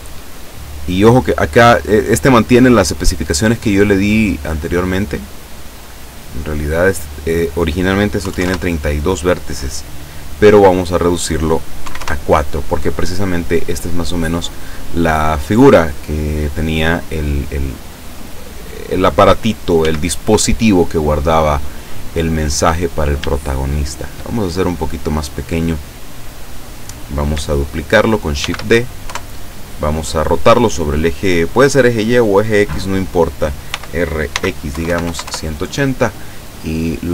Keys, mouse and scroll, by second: 5.0-7.1 drag, 8.3 KP_3, 8.5 KP_Enter, 10.9 click, 11.9 KP_4, 12.0 KP_Enter, 13.8-14.7 drag, 14.7 scroll down 1, 15.2 middle click, 16.9-17.3 scroll up 2, 18.0-19.1 drag, 19.8 s, 21.9 click, 22.3-22.6 scroll up 2, 22.9 scroll down 2, 23.4 shift+middle click, 28.5 shift+d, 33.7-35.1 typing, 35.3 KP_Enter.